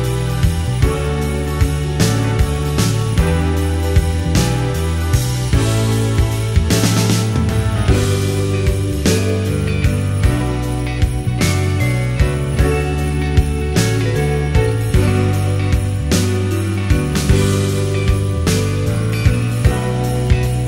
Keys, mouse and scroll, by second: 4.0 KP_7, 11.2-17.9 drag.